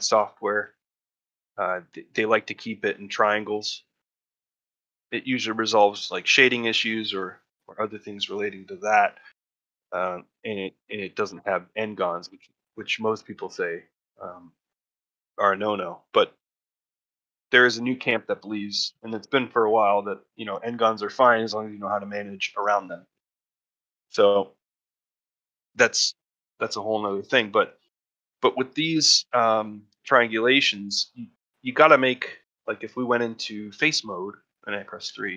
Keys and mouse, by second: 0.1 shift+middle click, 0.5 ctrl+middle click, 1.8 middle click, 3.9 middle click, 4.3 shift+middle click, 4.7 ctrl+middle click, 5.6 middle click, 6.5 middle click, 6.9 shift+middle click, 7.2 middle click, 7.7 middle click, 8.7 ctrl+middle click, 9.4 shift+middle click, 12.0 shift+middle click, 12.4 ctrl+middle click, 12.7 shift+middle click, 14.5 middle click, 14.9 shift+middle click, 15.4 middle click, 15.9 shift+middle click, 16.7 middle click, 17.6 middle click, 18.1 shift+middle click, 18.3 middle click, 19.0 shift+middle click, 20.1 middle click, 25.8 middle click, 26.2 shift+middle click, 26.9 shift+middle click, 27.2 middle click, 30.8 middle click, 31.1 shift+middle click, 31.6 middle click, 34.9 3.